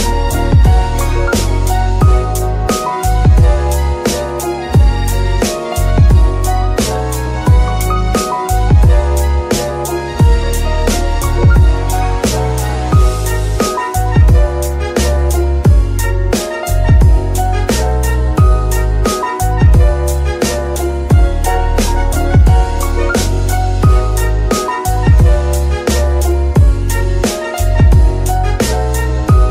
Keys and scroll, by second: 0.3 Tab, 0.8 s, 2.5 KP_3, 3.6 g, 3.7 y, 9.7 F2, 11.8-13.4 typing, 15.7 typing, 16.9 Tab, 17.4 typing, 18.8 s, 19.6 ctrl+z, 20.1 Tab, 20.7 s, 22.1 Tab, 22.5 s, 27.1 shift+F2, 28.2-29.5 typing.